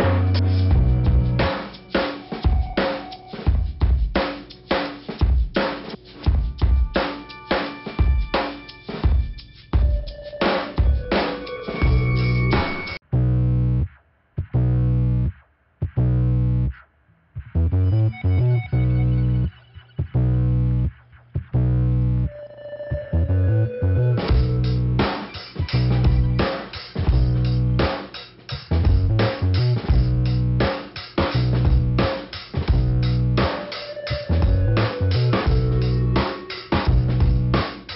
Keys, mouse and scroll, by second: 2.3 middle click, 3.0 click, 4.0-5.0 scroll up 2, 5.3 click, 6.5 click, 7.1 click, 8.5 click, 10.4 click, 12.3 click, 13.5 click, 14.5 click, 15.1 scroll down 2, 15.7 click, 18.3 middle click, 19.1 click, 20.9 click, 22.1 click, 22.5 click, 23.2 click, 24.8 click, 25.9 click, 26.4 click, 28.0 click, 29.4 click, 29.8 click, 30.8 click, 34.5 scroll down 1, 35.5 click, 35.5 ,, 36.8 click, 37.4 click.